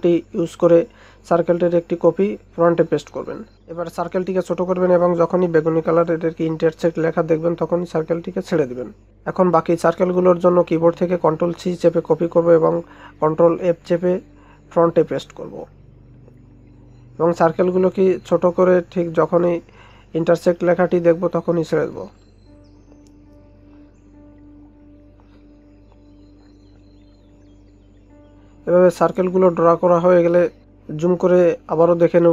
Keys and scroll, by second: 5.5 ctrl+space, 8.7 ctrl+c, 9.0 ctrl+f, 13.2 ctrl+c, 13.5 ctrl+f, 15.1 ctrl+c, 15.4 ctrl+f, 17.6 ctrl+c, 20.2 ctrl+c, 20.5 ctrl+f, 23.0 ctrl+c, 23.3 ctrl+f.